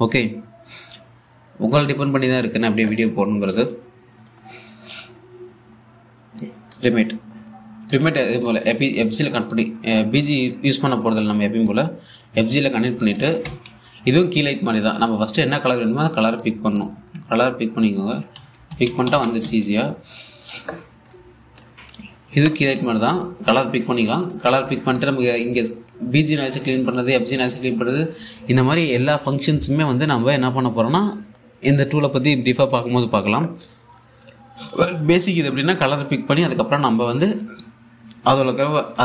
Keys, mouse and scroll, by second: 0.2-1.1 typing, 0.7 click, 2.2-3.1 scroll down 1, 4.1 click, 6.1 a, 7.9 typing, 12.2 click, 22.3 click.